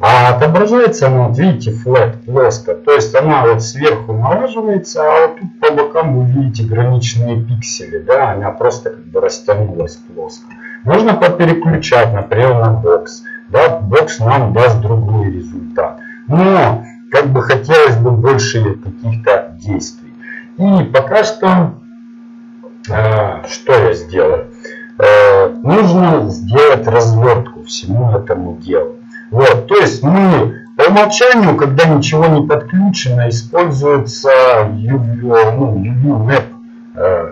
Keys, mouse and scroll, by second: 2.2-4.2 middle drag, 4.8 middle click, 10.0-12.7 middle drag, 12.7 click, 13.1-15.0 middle drag, 30.7 click.